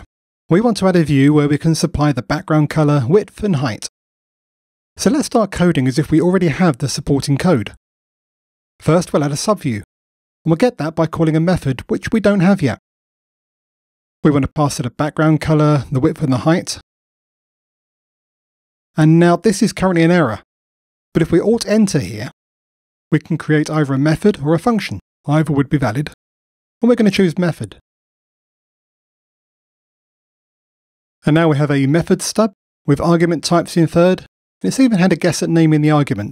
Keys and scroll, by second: 9.3 Return, 19.9 F2, 21.7 alt+Return.